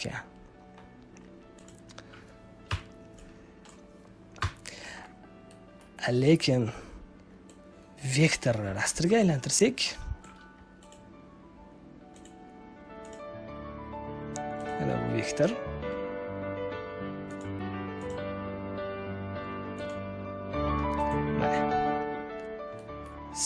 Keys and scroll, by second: 2.6 Delete, 4.3 Delete.